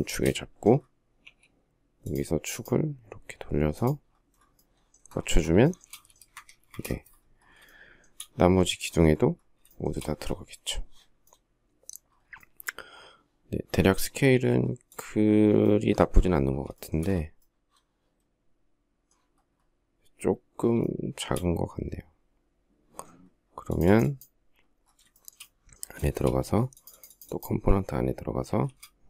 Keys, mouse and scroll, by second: 1.0 q, 5.4 shift+middle click, 5.9 space, 6.1 Escape, 6.4 space, 6.8 Escape, 7.4 shift+middle click, 9.5 shift+middle click, 16.6 shift+middle click, 20.6 shift+middle click, 24.9 shift+middle click, 25.9 shift+middle click, 28.2 shift+s.